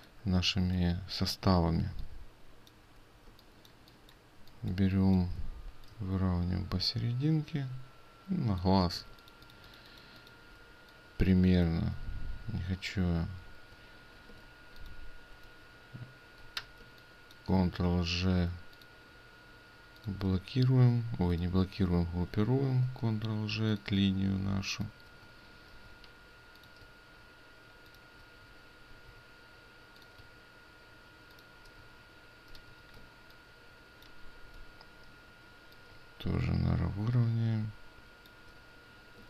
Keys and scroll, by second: 1.8 ctrl+space, 9.1 ctrl+space, 14.5 ctrl+alt+space, 16.7 ctrl+g, 16.7 ctrl+space, 23.0 ctrl+g, 25.8 ctrl+g, 29.0 ctrl+g, 32.6 ctrl+g.